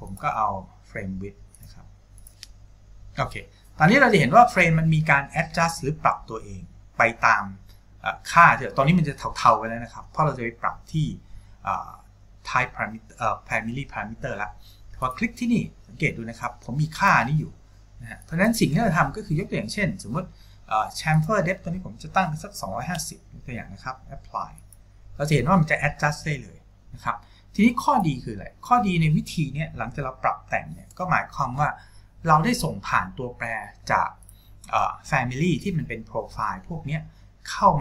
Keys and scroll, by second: 22.8 5, 23.0 KP_0.